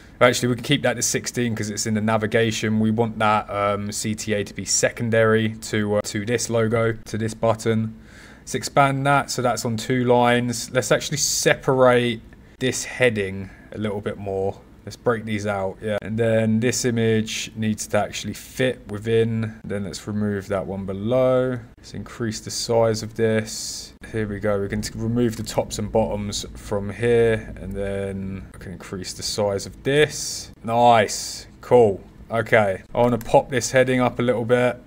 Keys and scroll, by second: 11.4 shift+Caps_Lock, 21.7 shift+Caps_Lock, 22.9 super+z, 25.0-25.8 typing, 32.7-33.5 typing.